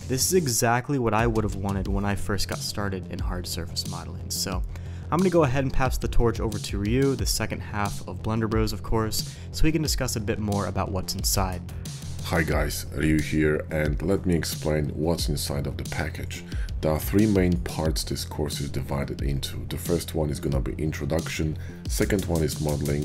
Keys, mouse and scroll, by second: 0.0 Tab, 0.0-0.9 typing, 0.3 Tab, 0.4 Tab, 1.1 ctrl+z, 1.1 Tab, 1.2 Tab, 1.3 click, 1.8 shift+click, 1.9-2.7 typing, 2.0 middle click, 2.3 shift+click, 3.5 ctrl+KP_Subtract, 3.8 shift+d, 3.9 r, 4.5 click, 4.5 g, 4.7 ctrl+KP_Subtract, 4.8 click, 4.9 middle drag, 5.4 shift+click, 5.9-7.8 middle drag, 8.0 shift+middle drag, 8.6 drag, 8.7 middle click, 9.1 /, 9.8-10.3 drag, 10.8-11.7 drag, 12.5-12.9 middle drag, 13.1 KP_5, 13.9-14.3 middle drag, 14.7 shift+middle click, 15.2 middle drag, 15.4 `, 15.8 KP_5, 16.8 shift+click, 18.0 shift+drag, 18.7 shift+drag, 22.3 middle click.